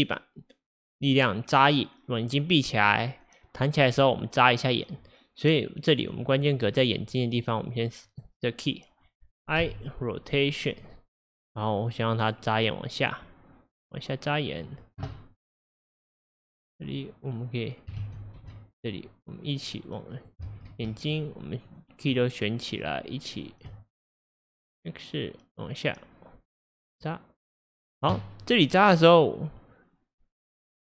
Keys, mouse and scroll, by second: 6.7 scroll, 7.6 drag, 8.2 click, 9.6 typing, 10.8 i, 12.7 click, 12.7 typing, 16.1 click, 18.1 ctrl+z, 18.4 ctrl+z, 18.9-20.5 drag, 20.5 ctrl+z, 21.1 shift+click, 21.7 shift+click, 22.8 shift+click, 23.4 shift+click, 24.6 shift+click.